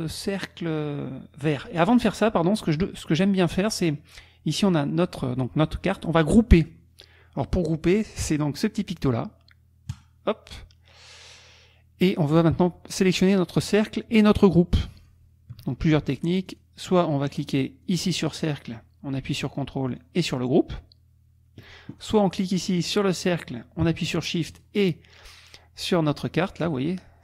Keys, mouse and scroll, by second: 2.6 click, 10.1 click, 11.4 click, 15.0 shift+click, 16.5 shift+click, 17.4 shift+click, 17.8 shift+click, 18.3 click, 19.9 ctrl+click, 21.9 ctrl+click, 22.6 click, 24.5 shift+click.